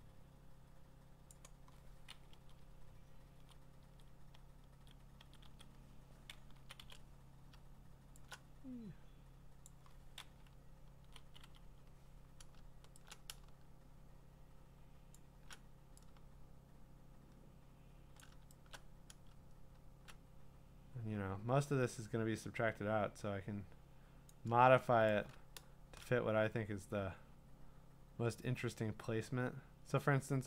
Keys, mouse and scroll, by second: 1.3 click, 2.3 Left, 2.6-3.5 Left, 3.8 Right, 4.3 Right, 4.8 Right, 5.2 Right, 5.4 Right, 6.5 Down, 6.8 Down, 9.6 click, 10.5 Left, 11.0 Left, 11.2 Down, 11.4 Down, 15.1 shift+click, 18.2 shift+click, 24.3 click, 26.8-28.7 drag.